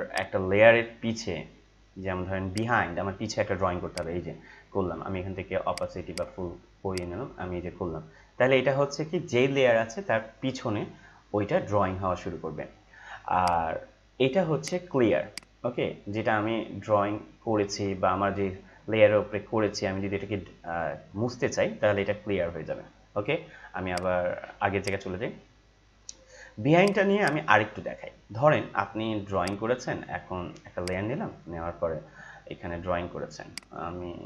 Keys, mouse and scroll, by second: 13.4-24.0 drag, 33.6-34.2 drag.